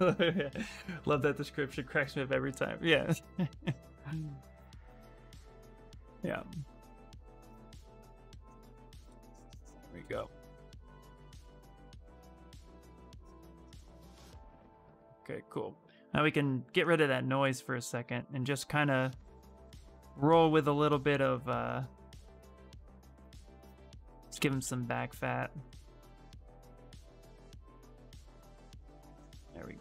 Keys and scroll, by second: 17.1 s.